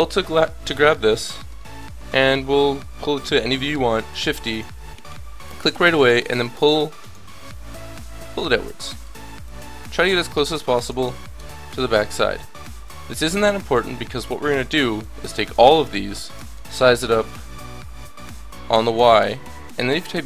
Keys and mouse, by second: 0.1 click, 4.1 shift+d, 5.8-7.5 drag, 9.4-11.2 drag, 11.2 middle click, 11.3 KP_3, 11.8 middle click, 12.8-14.6 drag, 14.4 a, 14.6 b, 15.0-16.3 drag, 16.3 s.